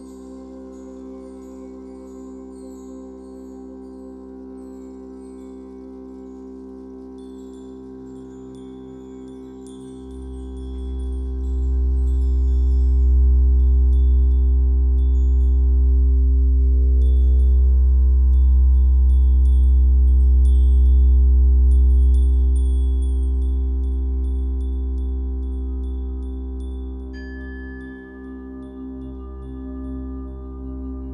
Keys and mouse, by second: 0.1-0.9 drag, 1.5 typing, 1.9 click, 2.6-3.0 drag, 3.9 typing, 4.2-6.1 drag, 6.4 typing, 6.8-8.0 drag, 7.7 typing, 13.2 space, 13.8 ctrl+s, 14.6-17.7 drag, 20.5 ctrl+s, 22.6-24.3 drag, 26.2-28.7 drag.